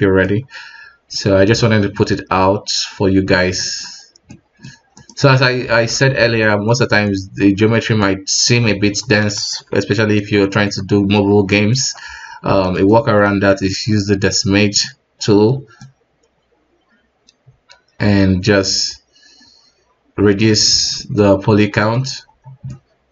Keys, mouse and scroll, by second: 1.0-1.4 scroll down 2, 1.4-3.8 middle drag, 3.8-4.3 scroll up 2, 4.3-4.9 middle drag, 4.9 right click, 5.3 scroll down 2, 5.6 alt+w, 6.1 alt+a, 6.4-7.0 middle drag, 7.0 scroll up 1, 7.1-9.3 middle drag, 9.3 alt+w, 9.9 right click, 10.4-11.1 middle drag, 11.1-11.5 scroll down 2, 11.5-11.8 middle drag, 11.8-12.6 scroll up 1, 14.8-20.0 drag, 20.8 alt+a, 21.0 middle click, 21.4 alt+w, 21.7-22.1 scroll up 2, 22.1 alt+w, 22.4-22.7 scroll down 1, 22.7-23.1 middle drag.